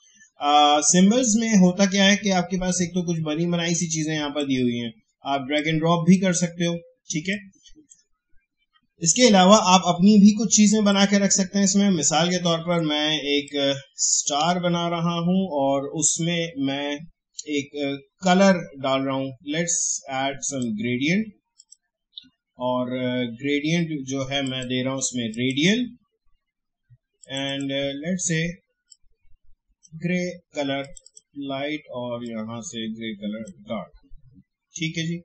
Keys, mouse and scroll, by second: 3.8-8.6 drag, 8.6 Delete, 10.9-17.3 drag, 20.4 click, 24.4-35.2 drag.